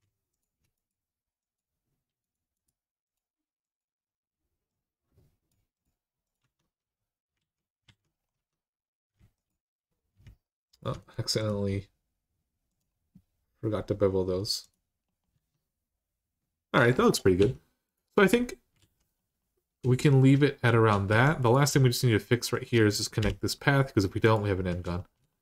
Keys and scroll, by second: 6.2 Tab, 7.2 alt+z, 7.6 alt+z, 8.1 Tab, 15.1 Tab, 17.2 Tab, 18.6 alt+z, 20.9 1, 23.0 j.